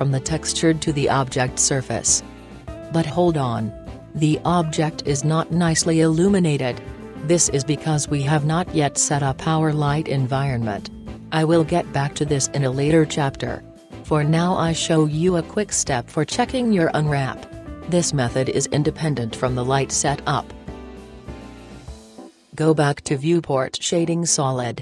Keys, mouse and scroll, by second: 1.5 Tab, 2.7-3.8 middle drag, 3.8-4.5 scroll down 1, 4.5 scroll up 2, 4.5 middle click, 4.7 middle click, 4.9-6.7 middle drag, 6.8-8.5 middle drag, 16.0-17.7 middle drag, 20.9 Tab.